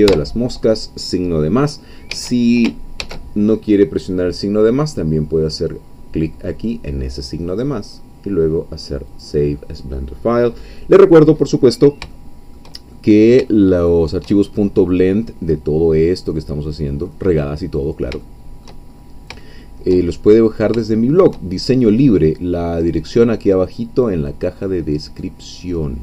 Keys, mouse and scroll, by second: 2.1 Escape, 3.0 ctrl+shift+s, 7.5 click, 9.1 click, 9.9 scroll down 1, 10.2 middle click, 10.5-10.9 scroll up 1, 11.6-12.0 scroll down 1, 12.0 shift+middle click, 12.1-14.4 shift+drag, 14.4-14.7 shift+scroll up 1, 15.0-17.2 drag, 18.1 shift+middle click, 18.3 shift+middle click, 18.9-19.3 shift+scroll up 3, 19.4 shift+middle click, 20.1-20.7 shift+scroll up 3, 20.8 shift+middle click, 21.7-24.6 shift+middle drag, 24.7 scroll down 2, 25.2-26.0 middle drag.